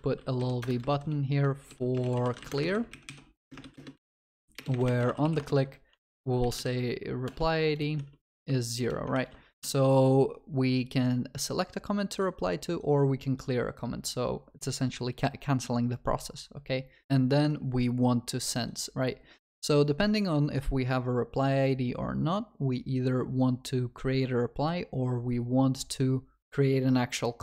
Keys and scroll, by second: 0.6 Return, 5.4 Return, 9.1 Return, 13.6 ctrl+s.